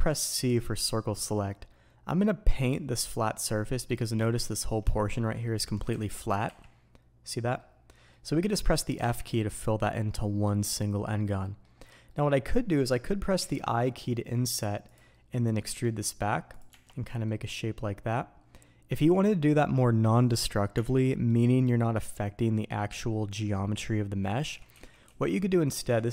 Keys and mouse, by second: 16.8-26.1 drag.